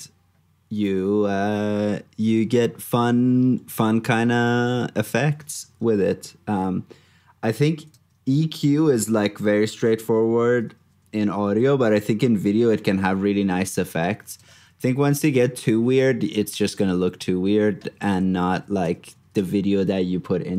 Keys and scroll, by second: 5.6 super+Tab, 10.0 super+d, 14.4 super+d, 17.8 super+d.